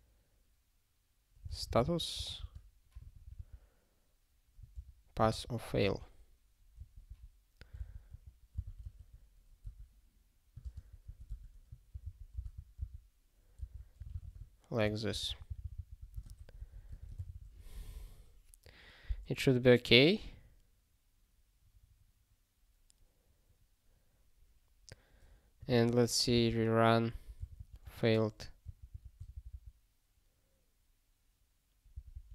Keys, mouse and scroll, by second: 1.8 s, 2.3 space, 2.9 p, 5.2 ctrl+g, 6.7 ctrl+p, 7.1 ctrl+a, 7.8 ctrl+alt+k, 8.1 ctrl+/, 8.5 Return, 8.6 ctrl+p, 8.8 ctrl+y, 9.6 Tab, 10.6 ctrl+space, 10.7 ctrl+p, 11.0 ctrl+a, 11.3 Tab, 11.9 ctrl+n, 12.3 ctrl+b, 13.6 alt+d, 14.0 f, 14.8 ctrl+g, 15.4 ctrl+n, 15.6 ctrl+n, 16.0 ctrl+a, 16.4 ctrl+alt+@, 16.6 ctrl+alt+@, 16.9 alt+;, 17.3 ctrl+s, 21.6 scroll down 1, 25.7 ctrl+s, 26.3 r, 27.6 -, 28.6 ctrl+s, 31.9 ctrl+g, 32.1 ctrl+g.